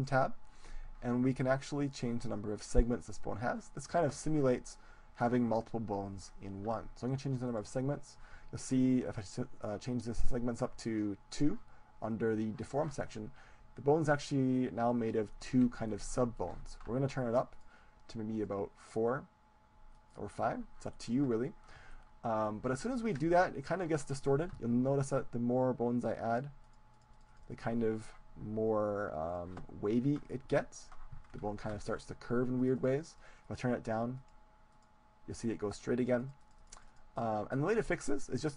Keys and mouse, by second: 0.0-1.8 drag, 7.5-9.5 drag, 15.5-17.6 middle drag, 17.6-22.0 drag, 22.0-25.1 middle drag, 25.1-29.2 drag, 31.3-32.5 middle drag, 32.5-38.5 drag.